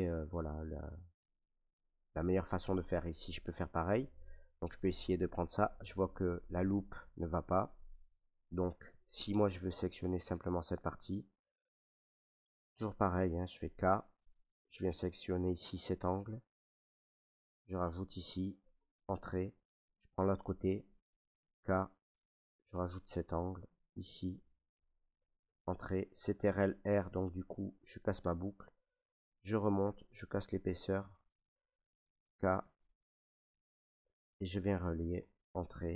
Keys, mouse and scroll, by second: 0.8 Tab, 3.4 ctrl+r, 7.8 right click, 9.0 shift+middle click, 11.0 middle click, 11.2 middle click, 11.3 shift+middle click, 12.0 shift+middle click, 13.3 k, 15.0 click, 15.0 k, 17.7 click, 18.8 Return, 19.8 middle click, 21.4 k, 22.3 click, 24.3 click, 25.4 Return, 26.7 ctrl+r, 28.0 click, 29.7 click, 32.6 k, 33.4 click, 34.4 click, 35.1 Return, 35.5 middle click, 35.5 middle click, 35.6 middle click.